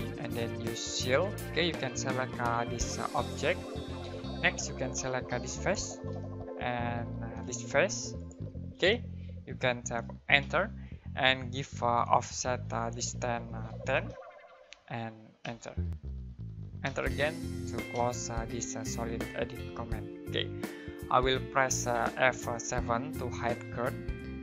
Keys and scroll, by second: 10.4 space, 13.7-15.4 typing, 16.8 space, 23.8 F7.